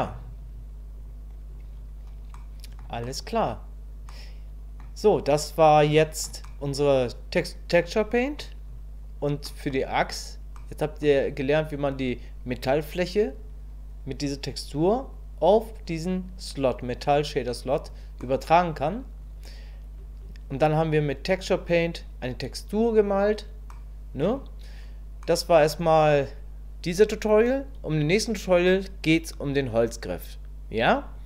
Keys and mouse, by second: 1.0 click, 2.3 middle click, 3.1 middle click, 4.1 middle click, 6.0 shift+middle click, 6.4-8.4 middle drag, 9.5 middle click, 10.6 middle click, 18.2 middle click, 23.7 middle click, 25.3 middle click.